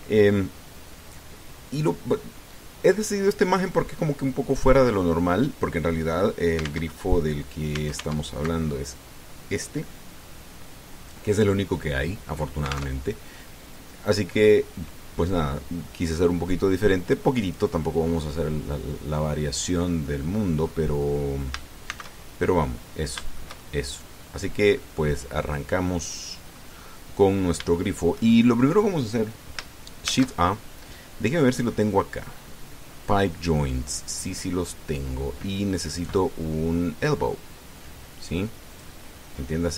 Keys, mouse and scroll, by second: 7.7 alt+Tab, 8.7 alt+Tab, 13.8 alt+Tab, 18.2 click, 19.9-20.2 scroll down 2, 20.9 click, 21.8 click, 22.7 shift+c, 23.2 shift+scroll up 1, 23.5-25.9 drag, 26.4-27.5 drag, 27.6-28.1 scroll up 1, 28.1 scroll down 1, 28.5-29.7 shift+middle drag, 30.9 shift+a, 39.5 click.